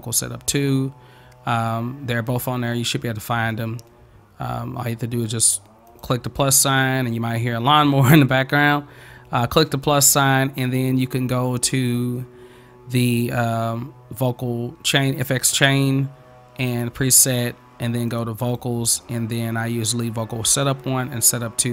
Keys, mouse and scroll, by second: 2.3-3.3 drag, 6.0 click, 16.7 click, 18.1 click, 18.4 click.